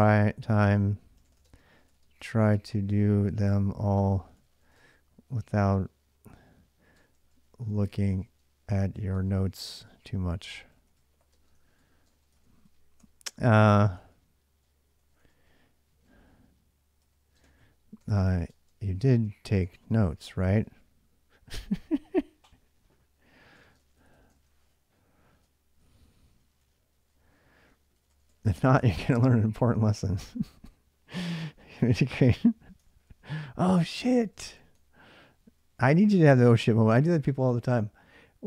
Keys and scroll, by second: 0.0-5.0 typing, 6.5-15.8 typing, 16.8-20.8 typing, 23.1-30.3 typing, 32.6 ctrl+[, 32.7-36.7 typing.